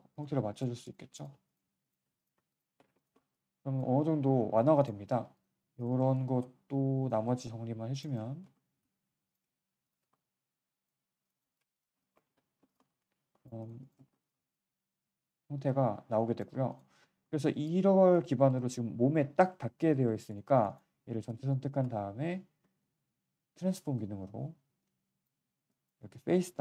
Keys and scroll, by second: 2.7 3, 5.1 1, 8.2 g, 8.8 z, 12.2 3, 16.9 alt+1, 21.0 ctrl+1.